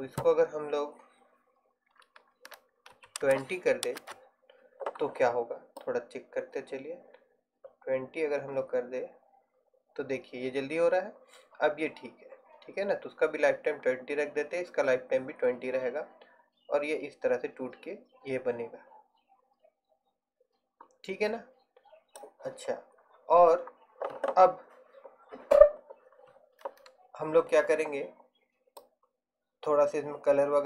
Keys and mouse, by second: 6.2-8.1 drag, 29.2-30.6 drag.